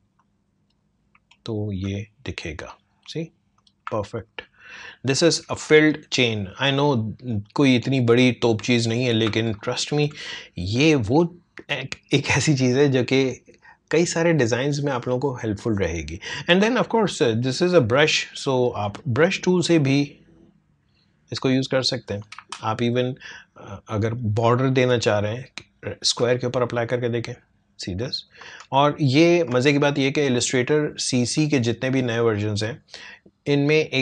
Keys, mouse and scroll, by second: 0.2 alt+click, 1.3 alt+scroll up 1, 2.5 click, 4.1 alt+scroll down 1, 5.0-5.4 alt+scroll up 1, 6.9-8.3 drag, 8.3 space, 8.4 click, 8.8 space, 9.6 alt+scroll down 1, 10.9-14.2 drag, 17.1-22.3 drag, 22.3 ctrl+z, 23.3-26.9 drag, 28.4 Tab, 30.3 click.